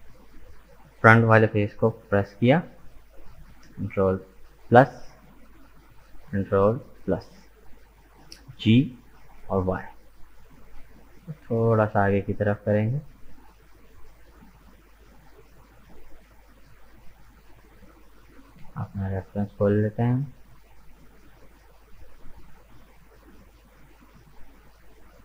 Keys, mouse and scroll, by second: 4.7 ctrl+KP_Add, 6.8 ctrl+KP_Add, 8.5 g, 16.5-19.3 middle drag, 19.3 click, 19.9 middle click, 20.8 right click, 21.2-24.3 middle drag, 24.9-25.2 middle drag.